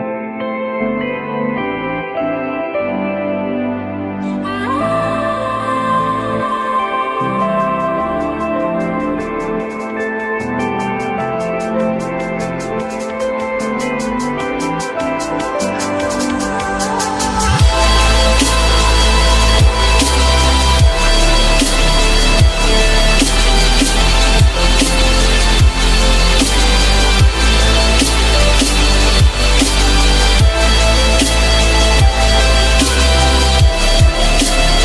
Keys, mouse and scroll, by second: 3.1 alt+middle click, 4.6 alt+middle click, 13.0 shift+click, 14.5 alt+middle click, 15.4 alt+scroll up 1, 17.8 ctrl+z, 23.4-24.4 typing, 30.9-31.8 typing, 32.0 Return, 34.5-34.8 typing.